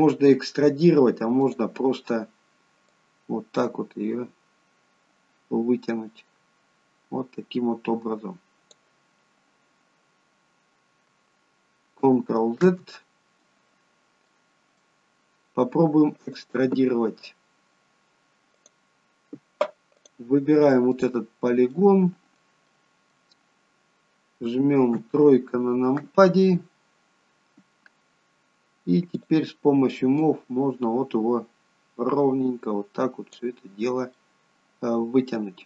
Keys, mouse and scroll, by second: 1.4 click, 2.9 click, 12.6 ctrl+z, 13.8-15.2 scroll up 3, 14.3 middle click, 15.2-15.6 scroll up 1, 16.2 click, 18.6 click, 21.7 click, 21.7 middle click, 22.7 middle click, 24.9 KP_3, 29.1 click, 30.2 click, 33.6-34.4 scroll down 2, 34.1 middle click.